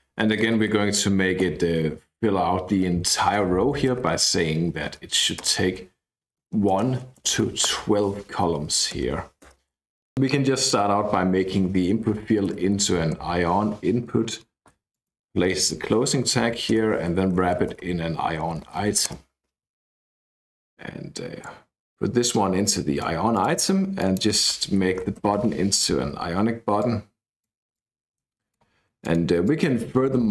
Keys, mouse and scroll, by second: 0.0-1.4 typing, 2.8 c, 3.9 BackSpace, 4.1 c, 4.9 Down, 5.4 Return, 6.4-9.4 typing, 10.5 click, 11.4 Left, 12.1-13.6 typing, 14.9 click, 15.3-19.3 typing, 16.3 Up, 20.5-21.6 drag, 22.2-23.9 drag, 24.0 click, 24.5-25.6 typing, 26.8-28.8 drag, 29.0 click.